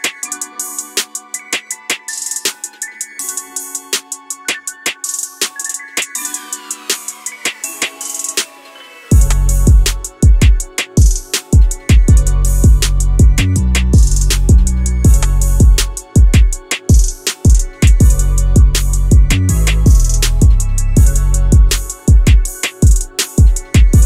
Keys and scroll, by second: 3.5 Return, 5.1 Return, 8.2 4, 8.8 0, 9.6 Return, 13.0 q, 13.1 w, 16.4 Escape.